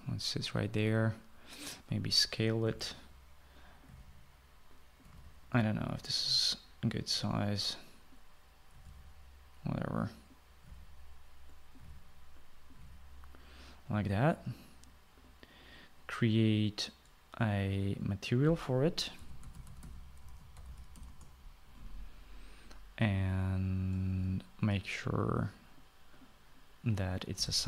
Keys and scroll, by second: 3.2-6.4 typing, 9.3-10.0 typing, 11.2-14.4 typing, 19.7-22.4 typing.